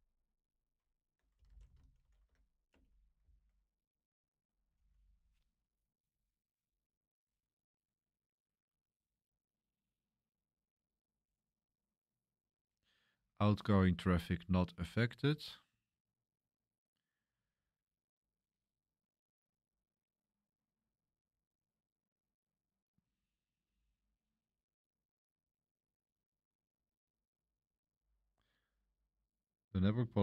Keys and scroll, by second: 1.1-5.0 typing.